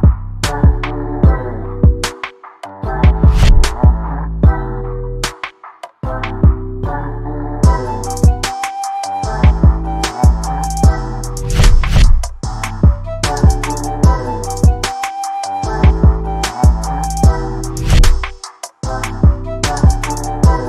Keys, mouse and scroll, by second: 2.6 shift+a, 6.0 shift+middle click, 6.8 middle click, 7.2 KP_1, 7.7 s, 8.9 z, 8.9 z, 9.8 middle click, 12.5 shift+middle click, 13.1 Tab, 13.4-14.0 drag, 14.4 click, 15.0 shift+click, 15.3 shift+middle click, 15.5 middle click, 15.9 shift+click, 17.3 ctrl+i, 17.9 Delete, 18.4 click, 18.8 shift+middle click, 18.9 click, 19.4 Tab, 19.5 middle click, 19.9 KP_1, 20.3 shift+middle click.